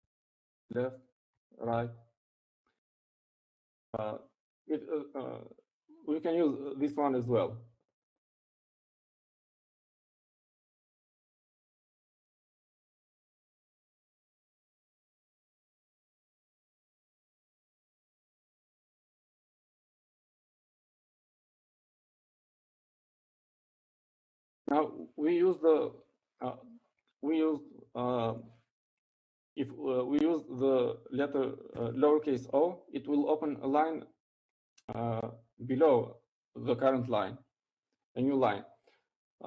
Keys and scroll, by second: 0.4 Down, 2.2 Left, 2.9 Left, 4.4 Right, 28.5 Up, 34.4 o.